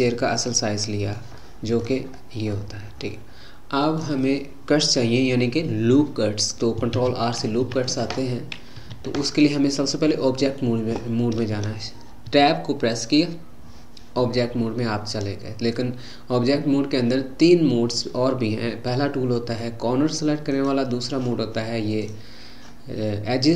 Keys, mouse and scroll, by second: 2.0-2.5 scroll up 2, 2.5-5.7 middle drag, 6.9 ctrl+r, 7.6 `, 12.3 Tab, 20.5-22.1 drag.